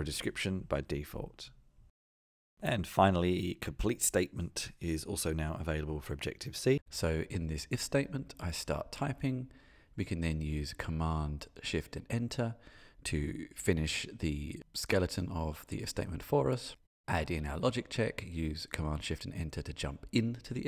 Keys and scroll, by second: 8.4 shift+super+Return, 18.4 shift+super+Return, 19.0 Tab, 19.5 shift+super+Return.